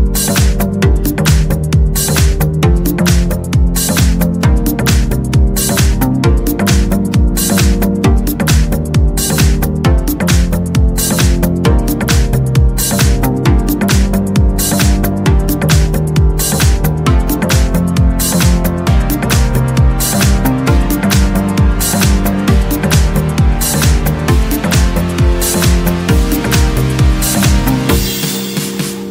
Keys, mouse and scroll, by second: 0.1 click, 0.7-2.7 middle drag, 2.7-3.7 scroll up 2, 4.6 click, 6.4 click, 8.0 click, 8.6 click, 10.4 click, 11.9 click, 12.9 click, 14.8 click, 15.6 click, 16.3 click, 16.9-18.0 middle drag, 18.7 click, 19.2 click, 20.6 1, 21.9-24.3 drag, 24.9-27.7 middle drag, 25.6 click, 27.7-29.1 middle drag.